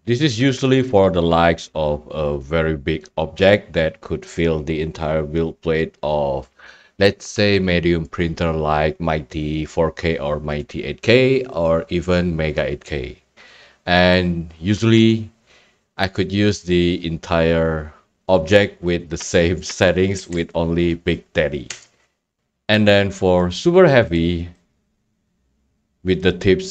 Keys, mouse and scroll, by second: 0.9-1.9 right drag, 1.9 right click, 20.1 e, 21.7 Tab, 23.5 click, 24.6 right click, 24.8 scroll, 24.8 scroll down 3, 25.0 scroll.